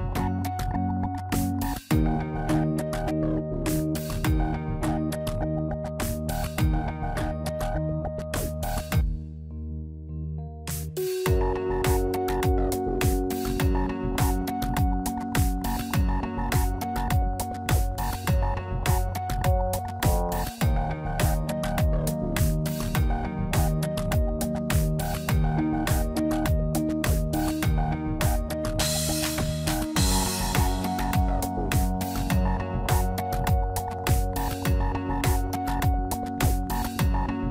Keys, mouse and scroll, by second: 0.0-0.4 scroll up 1, 1.3 scroll up 1, 1.3 shift+d, 2.7 p, 3.4 Tab, 3.5 click, 4.0 click, 4.4 Tab, 5.2 a, 5.5 middle click, 6.0 shift+middle click, 7.0 middle click, 8.4 click, 10.4 click, 14.6 shift+click, 17.2 middle click, 17.7-18.3 scroll up 5, 18.1 middle click, 20.5 shift+click, 22.5 middle click, 23.3 scroll down 3, 23.6 middle click, 26.0 s, 32.8 middle click, 33.3-33.6 scroll down 3, 33.6 middle click, 34.6 s, 36.8 scroll up 1.